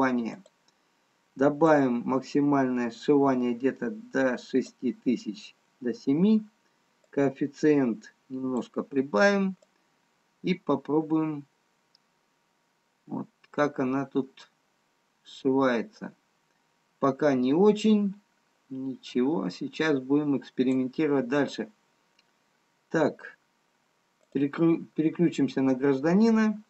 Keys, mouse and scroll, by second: 0.5 click, 2.2 click, 9.1 click, 10.2 click, 24.5 click.